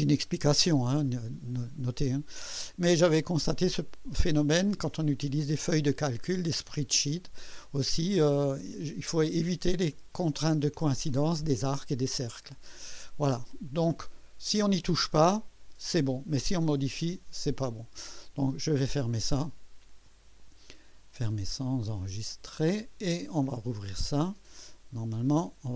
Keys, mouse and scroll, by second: 8.0-10.4 drag, 13.2-14.1 drag, 19.2 click, 21.9 click, 24.3 click, 25.4-25.7 drag.